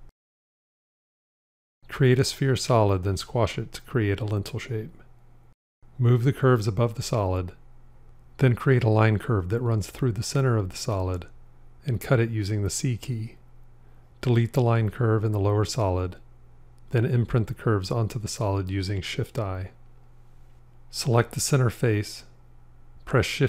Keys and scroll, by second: 13.1 c, 19.0 shift+i.